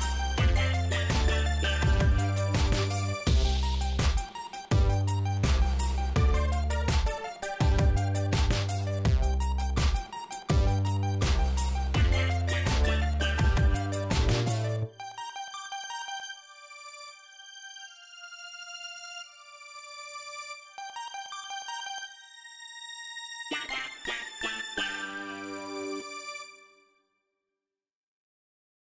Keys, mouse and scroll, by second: 0.0 click, 1.5 click, 2.6 middle click, 3.0 scroll up 2, 3.3 middle click, 7.1 click, 7.5 click, 13.1 click, 13.7 click, 14.2 shift+right click, 18.1 click, 19.7 click, 20.5 click, 20.9 right click, 21.7 click, 26.0 click, 27.7 4, 27.9 Return.